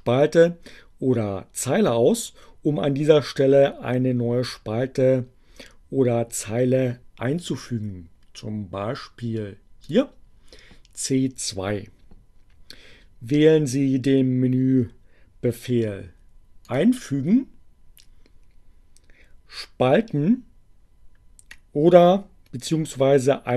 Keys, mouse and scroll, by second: 9.5 click, 16.7 click.